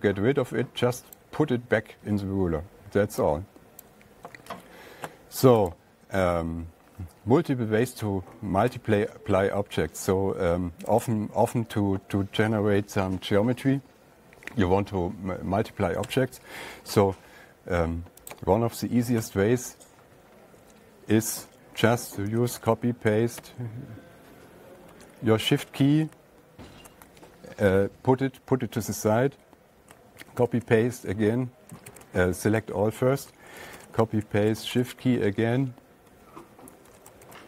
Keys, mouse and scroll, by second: 0.0 click, 1.6 click, 4.3 click, 5.0 alt+Tab, 6.2 click, 6.2 alt+Tab, 9.2 alt+Tab, 11.5 click, 16.6 Tab, 18.8 click, 19.6 Tab, 22.7 ctrl+c, 23.0 ctrl+v, 23.8 Right, 25.2 Right, 30.7 ctrl+c, 30.9 ctrl+v, 32.3 ctrl+a, 34.1 ctrl+c, 34.2 ctrl+v, 34.9 Down, 35.1 Down, 35.2 Down, 35.5 Down, 36.6 Up, 36.7 Up.